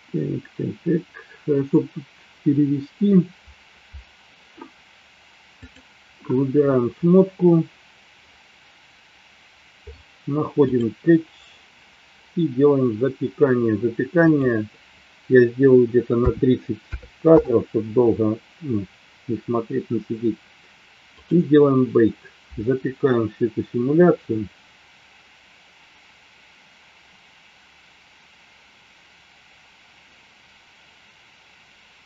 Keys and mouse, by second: 5.5 click, 14.4-17.9 drag, 21.0 click.